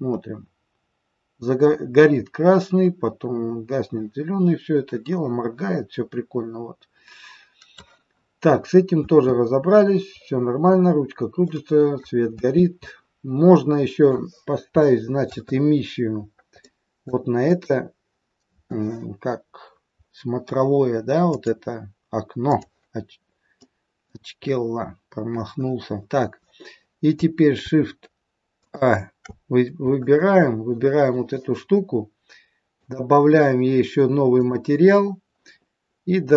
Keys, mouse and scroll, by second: 8.0-8.7 scroll down 9, 9.0 space, 10.1-10.5 scroll up 5, 10.7 scroll down 1, 11.5 middle click, 12.5 space, 12.8 middle click, 14.7 shift+scroll up 1, 14.9 shift+middle click, 15.5-16.2 scroll up 4, 16.2 scroll up 3, 16.5 middle click, 17.3 click, 19.2 scroll down 1, 20.0 scroll down 2, 21.2 click, 23.3 scroll up 1, 23.5 middle click, 24.5-26.4 scroll up 1, 28.5 alt+shift+click, 29.9 shift+click, 32.7 click, 34.2 click.